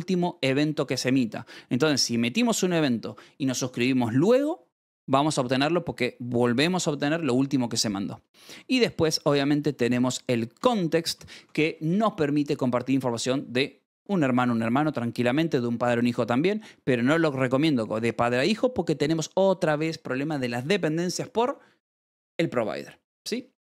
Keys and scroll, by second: 7.8 Escape, 7.9-11.1 typing, 10.0 Escape, 10.5 ctrl+s.